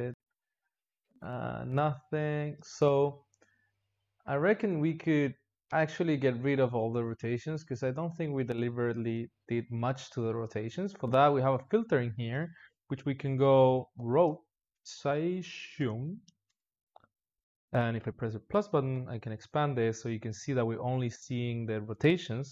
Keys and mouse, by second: 0.2 r, 1.3 click, 1.6 r, 3.5 click, 4.3 click, 4.7 r, 6.7-9.7 drag, 11.1-14.3 drag, 18.8 KP_Add.